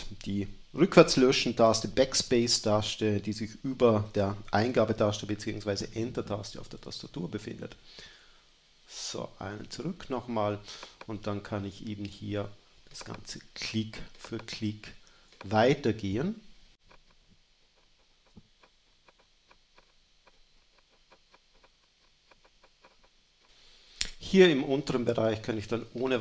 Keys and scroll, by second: 7.1 BackSpace, 10.7 BackSpace, 16.9 space, 17.9 space, 19.7 space, 21.4 space, 22.7 space.